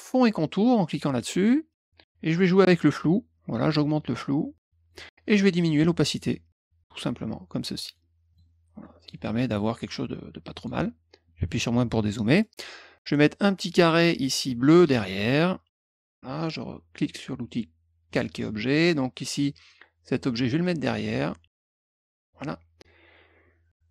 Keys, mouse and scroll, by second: 2.6-4.8 drag, 5.6-7.9 drag, 8.2 click, 8.8 middle click, 10.5 click, 12.1 middle click, 13.6 click, 14.8-16.0 drag, 18.0 click, 19.6-22.2 drag.